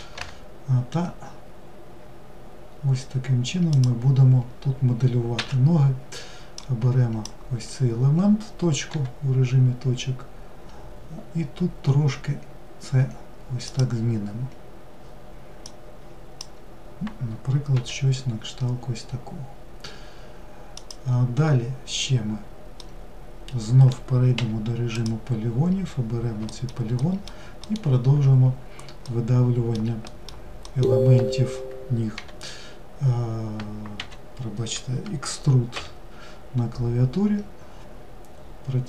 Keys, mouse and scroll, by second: 6.2 click, 15.3 click, 22.4-24.0 middle drag, 24.0 3, 24.6 click, 26.1 alt+middle click, 26.6 alt+middle click, 28.1-28.7 scroll down 1, 28.7-29.8 middle drag, 30.3 alt+middle click, 31.8 g.